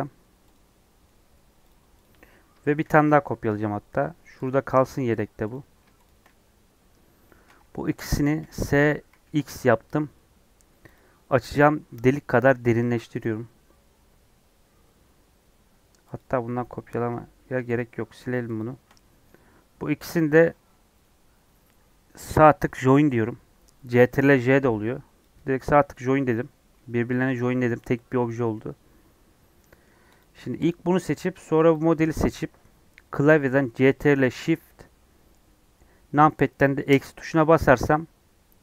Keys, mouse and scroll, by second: 1.0 middle click, 1.6 click, 2.0 click, 2.8 shift+d, 5.1 click, 5.5 click, 6.0 shift+click, 7.2-8.3 middle drag, 8.3 s, 12.3 g, 16.1 click, 17.7 x, 18.1 click, 18.9-20.9 middle drag, 25.2 right click, 25.9 click, 26.3 click, 26.7 middle click, 27.3 g, 28.5-30.1 middle drag, 30.1 click, 30.6 click, 30.9 middle click, 31.7 shift+click, 36.9 ctrl+shift+KP_Subtract.